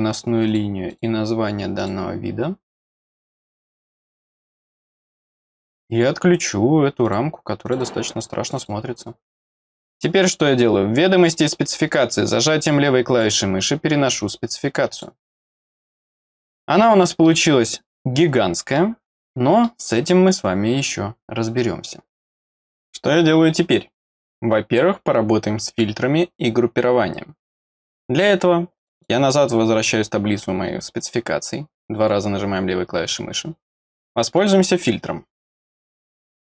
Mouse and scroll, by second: 0.4 click, 0.9 click, 1.7 click, 2.7 click, 3.8 click, 4.3 middle click, 4.8 middle click, 5.0 middle click, 5.3 click, 7.0 click, 7.6 click, 7.8 click, 8.4 click, 8.5 click, 9.0-9.4 scroll down 1, 9.4 middle click, 11.3 click, 12.3 click, 14.9 click, 16.0 middle click, 16.5 middle click, 18.2 middle click, 19.2 middle click, 28.7 click, 28.9 click, 34.3 click.